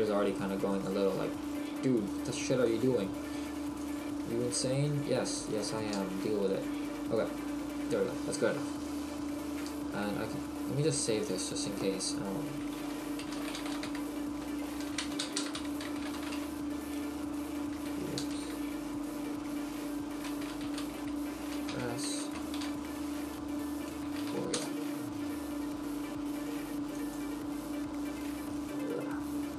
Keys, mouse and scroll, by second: 0.9 click, 8.7 middle click, 27.5 click.